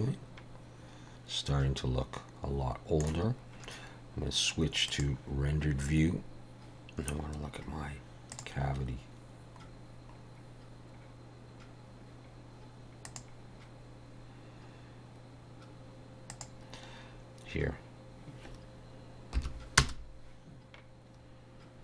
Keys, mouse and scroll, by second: 1.1 middle click, 4.9 click, 8.6 click, 10.4-10.8 scroll down 3, 13.4 click, 16.7 click.